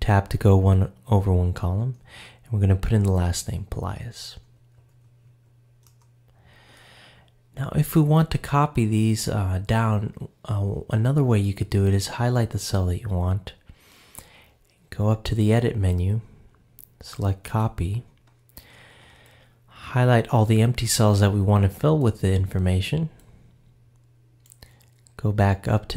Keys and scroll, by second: 1.6 Tab, 4.1 shift+p, 5.9 Return.